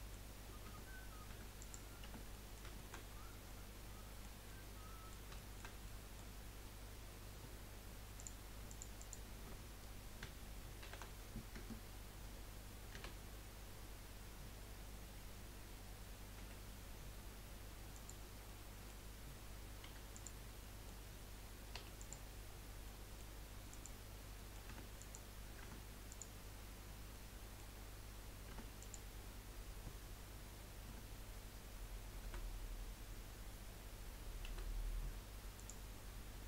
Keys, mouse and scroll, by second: 0.3-0.7 scroll up 2, 0.7 Tab, 1.3 Tab, 1.6 click, 2.0 Tab, 2.3 middle click, 3.0-3.4 scroll up 4, 3.4-6.3 middle drag, 6.3 scroll up 1, 8.1 click, 8.7 alt+shift+click, 9.0 alt+shift+click, 10.8 shift+d, 13.0 f, 16.4 p, 18.4-19.9 middle drag, 19.9 3, 20.2 click, 20.5 scroll up 1, 20.7-21.7 middle drag, 21.7 3, 22.0 click, 22.5-23.0 scroll down 3, 23.0 middle click, 23.7 click, 24.4 middle click, 24.7 Tab, 25.0 click, 25.6 Tab, 26.1 click, 27.1-28.5 middle drag, 28.5 Tab, 28.8-30.1 drag, 30.9 Tab, 32.2 a, 34.5 F3.